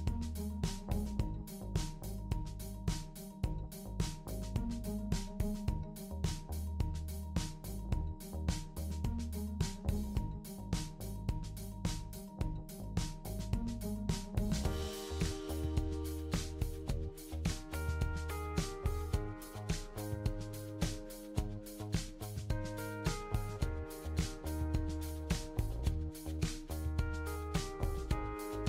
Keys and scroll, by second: 19.6 super+c, 19.9 super+v.